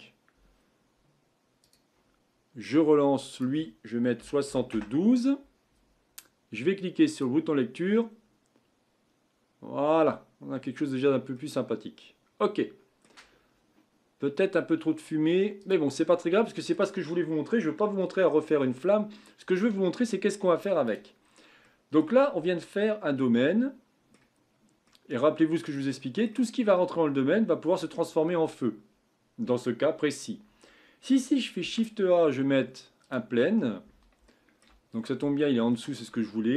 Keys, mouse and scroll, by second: 1.6-6.3 drag, 7.1-10.3 drag, 10.7-11.6 scroll up 4, 11.6-14.7 middle drag, 15.9 click, 16.0-16.4 scroll down 4, 16.4-18.7 middle drag, 18.7-19.8 scroll up 4, 20.8-21.2 drag, 21.2 scroll down 4, 21.6-22.3 middle drag, 22.3-22.6 scroll up 3, 22.6-29.1 middle drag, 31.6 shift+a, 34.3-34.9 shift+middle drag, 34.9-35.3 scroll up 6, 35.3-35.7 scroll down 4, 35.7-36.5 shift+middle drag.